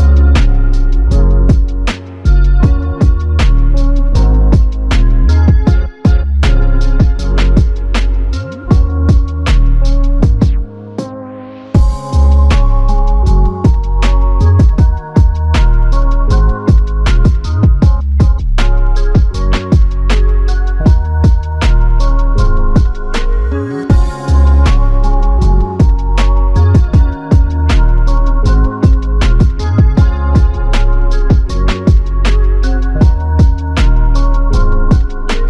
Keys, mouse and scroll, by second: 5.1 shift+click, 9.5 alt+click, 11.1 shift+click, 12.2 alt+click, 13.8-14.1 typing, 15.2 alt+shift+click, 20.2 f, 32.0 double click, 33.5 alt+click.